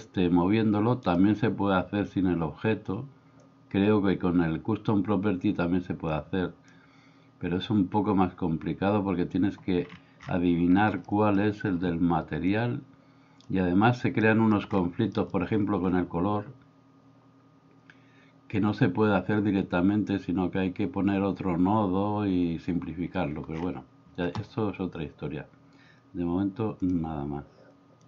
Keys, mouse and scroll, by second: 6.3 click, 11.2 middle click, 12.5-13.5 drag, 14.2-14.5 middle drag, 15.3 middle click.